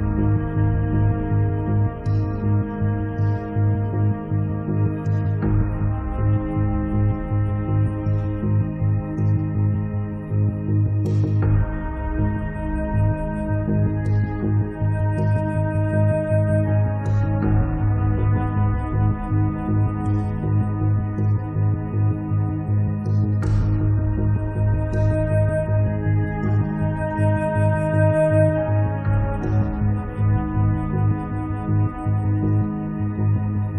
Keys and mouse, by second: 0.4 middle click, 0.7-2.0 drag, 1.2 middle click, 2.0 middle click, 2.1-5.7 drag, 5.1-6.4 middle drag, 5.1 right click, 5.9 click, 5.9 right click, 6.5 middle click, 6.5 right click, 6.8 right click, 6.9 click, 7.7 middle click, 7.9 click, 7.9 right click, 8.5 right click, 8.7-10.8 middle drag, 10.4 8, 10.9 click, 12.1-13.6 drag, 13.8-14.9 drag, 14.9 middle click, 15.2-16.9 drag, 15.2 right click, 16.8 right click, 16.9 middle click, 17.1 click, 18.1 click, 18.9-20.2 drag, 20.3-23.6 drag, 21.5 middle click, 21.5 right click, 23.1-24.7 middle drag, 23.1 right click, 24.7 click, 25.6 1, 25.7 f, 25.8-27.0 drag, 26.4 f, 27.0 middle click, 27.9 8, 28.1 f, 29.3 f, 29.4-31.1 drag, 31.3 click, 32.8 middle click.